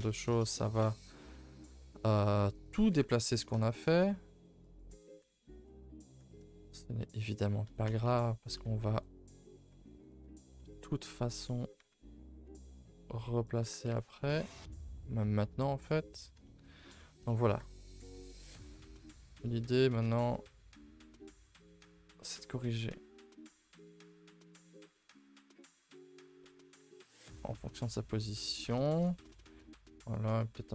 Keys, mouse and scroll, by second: 0.1-1.7 middle drag, 1.7 r, 2.9 g, 5.0 middle click, 5.0 middle click, 5.5 scroll down 1, 5.7 middle click, 6.2 Tab, 6.4 shift+middle click, 6.6-7.0 scroll up 5, 7.0 middle click, 14.7 KP_0, 26.4 middle click, 26.7 Tab, 27.0-27.5 scroll up 9, 27.5 middle click, 27.7-28.6 middle drag, 28.6-29.2 scroll up 3, 28.8 shift+middle drag, 29.2 Tab, 29.4-30.5 shift+middle drag, 30.5 r.